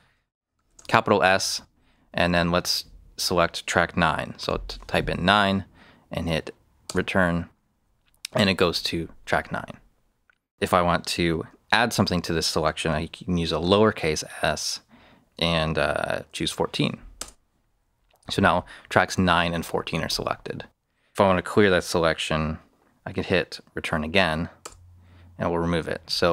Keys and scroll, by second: 0.6 shift+s, 4.4 9, 6.8 Return, 13.6 s, 16.0-16.8 typing, 17.1 Return, 24.6 Return.